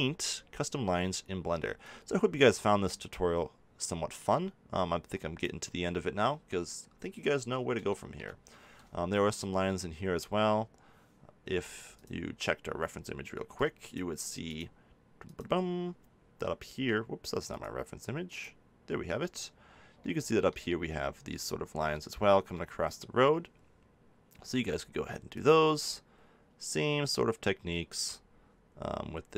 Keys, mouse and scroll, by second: 1.8-3.7 drag, 6.2-11.4 middle drag, 11.4 f, 12.0-13.9 drag, 15.7 click, 17.5 click, 18.4 click, 24.5 f.